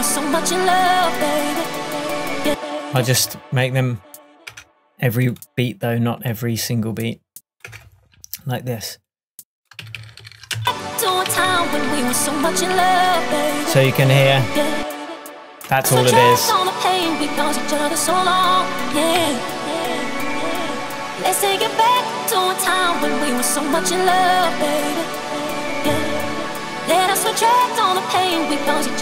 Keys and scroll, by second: 4.6 BackSpace, 7.8 BackSpace, 9.9 super+d, 13.3 shift+super+d, 13.4 shift+super+Tab.